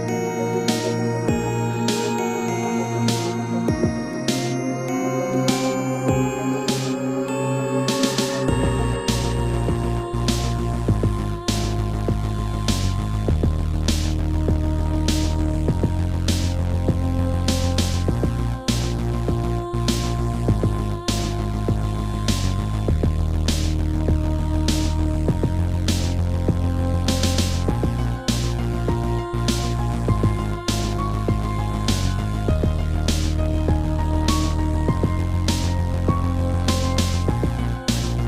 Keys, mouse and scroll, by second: 2.4 g, 3.3 click, 3.4 click, 4.3 click, 5.9 shift+middle click, 6.0 shift+middle click, 7.2 click, 9.0 Left, 9.7 scroll up 2, 11.2 shift+middle click, 11.6 middle click, 11.8 middle click, 12.8 middle click, 12.9 click, 13.1 click, 14.2 shift+click, 14.4 shift+click, 15.2 ctrl+c, 15.6 Left, 16.2 ctrl+v, 20.1 Left, 20.6 Right, 21.1 Left, 24.1 click, 24.1 click, 25.2 shift+click, 26.1 shift+click, 27.0 ctrl+c, 27.4 Right, 27.9 ctrl+v, 28.6 Left, 29.0 Right, 31.3 middle click, 35.0 shift+middle click.